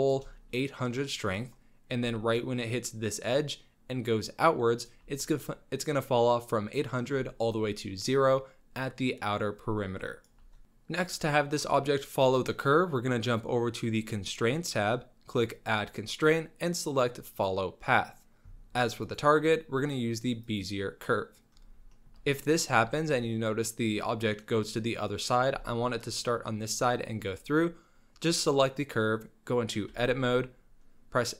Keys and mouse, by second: 2.4 shift+click, 3.6-4.9 shift+drag, 7.8-10.4 shift+drag, 13.2 click, 15.5-17.9 drag, 19.1-21.0 drag, 21.9 shift+middle drag, 22.4 middle drag, 22.9 shift+middle click, 24.4 middle click, 24.6-25.5 middle drag, 25.7 shift+click, 28.2 click, 30.2 Tab.